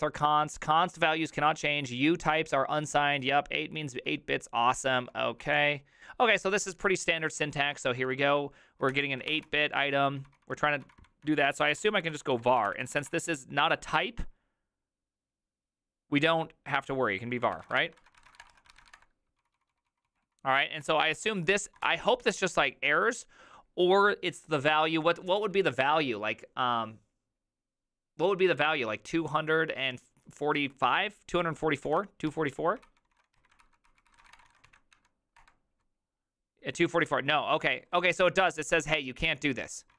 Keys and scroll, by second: 0.0-13.5 typing, 17.4-21.9 typing, 18.4 Return, 18.5 ctrl+u, 18.7 ctrl+c, 19.0 Return, 31.9 ctrl+a, 32.3 3, 32.9 ctrl+c, 33.2 ctrl+a, 33.4-34.9 typing, 33.7 ctrl+c, 35.0 Up, 35.4 Return.